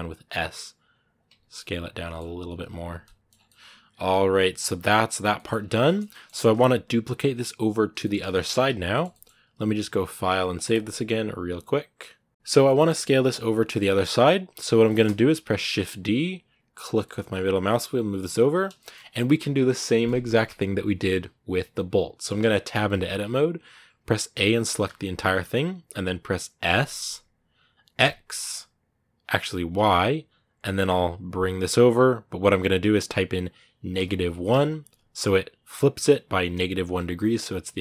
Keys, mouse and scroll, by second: 1.2 scroll down 2, 1.4 middle click, 1.9 scroll up 2, 2.2 Tab, 2.8 middle click, 3.1 scroll down 6, 3.2-4.3 middle drag, 4.3 scroll down 3, 4.4 middle click, 5.3 scroll up 2, 5.6 shift+middle click, 6.3-7.8 scroll down 2, 7.8 shift+middle click, 8.0 scroll up 2, 8.7-13.5 shift+middle drag, 13.5 scroll up 1, 13.7-15.5 middle drag, 15.5 shift+d, 18.6-22.5 shift+middle drag, 22.5 Tab.